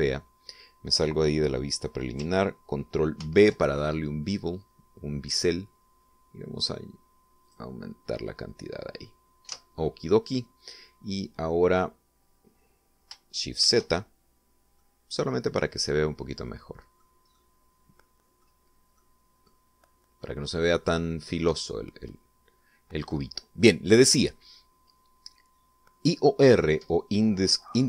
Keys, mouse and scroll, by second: 3.8 ctrl+b, 6.2-6.6 scroll up 2, 7.2 scroll up 2, 8.0 click, 10.1 Tab, 14.2 shift+z, 15.4-16.5 drag, 17.0 click, 17.9-19.2 drag, 19.6 click, 20.8 middle click.